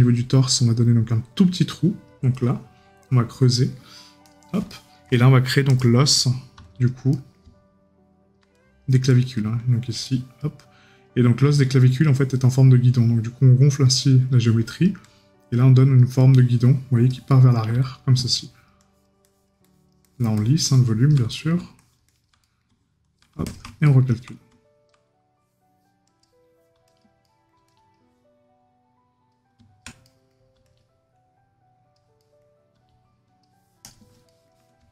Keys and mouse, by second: 3.5 right click, 7.1 right click, 17.3 right click, 21.3 right click, 23.9 right click, 27.2 right click, 30.0 right click, 32.2 right click, 34.3 right click.